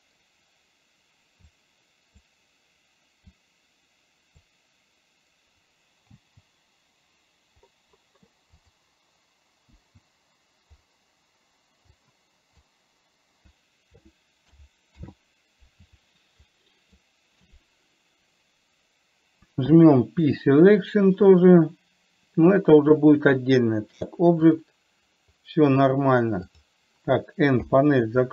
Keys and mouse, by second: 1.8 click, 3.8 click, 8.8 click, 12.3 click, 15.3 ctrl+z, 16.8 shift+click, 24.4-25.1 drag, 27.9 n.